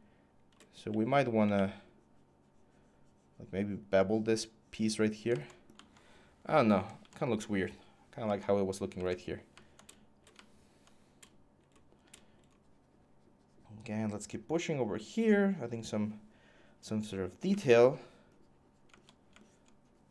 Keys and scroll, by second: 0.7 x, 1.3 x, 3.3 typing, 6.6 ctrl+z, 6.8 ctrl+z.